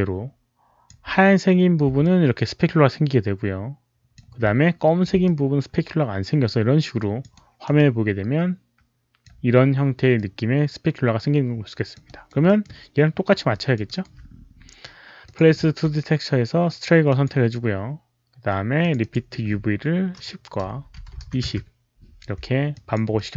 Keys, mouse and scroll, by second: 0.8 alt+right click, 0.8 alt+middle click, 1.9-4.0 alt+drag, 5.2-7.1 alt+drag, 5.5 alt+right click, 7.3 alt+right click, 7.7-9.2 alt+drag, 10.0-11.8 alt+drag, 11.9 alt+right click, 12.3 alt+middle click, 13.4 alt+click, 13.9 alt+right click, 15.1 alt+click, 17.0 alt+click, 18.7 alt+click, 18.9 alt+click, 20.9 Tab, 22.6 alt+click, 23.0 alt+middle click.